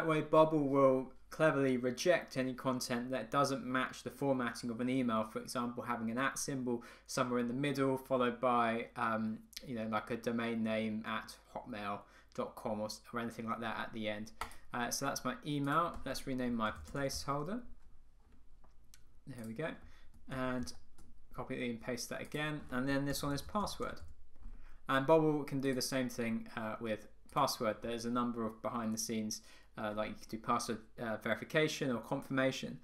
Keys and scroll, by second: 20.5 super+c, 20.7 super+v.